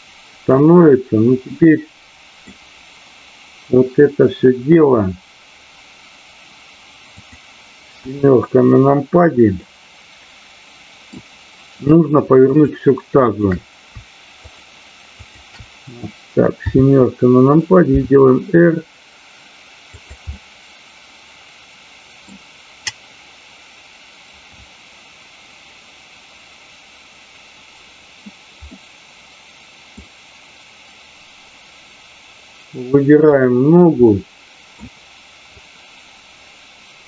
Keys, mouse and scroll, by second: 0.9-2.4 middle drag, 7.1 click, 7.9 KP_7, 9.5-11.2 middle drag, 12.4-13.9 shift+drag, 14.4-15.1 shift+drag, 15.2 shift+click, 16.5 KP_7, 17.9 r, 19.9 click, 20.3-22.3 middle drag, 28.8-30.0 middle drag, 33.4 click, 34.0-34.8 middle drag, 35.7-37.0 drag.